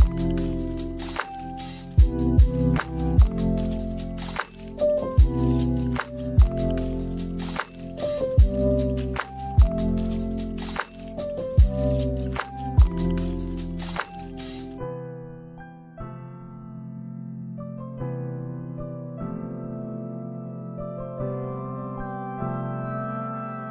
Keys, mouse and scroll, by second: 1.2 click, 4.5 shift+a, 14.5 click, 15.3 click, 16.1 click, 17.9 click, 18.8 click, 19.4 click, 19.9 click, 21.7 click.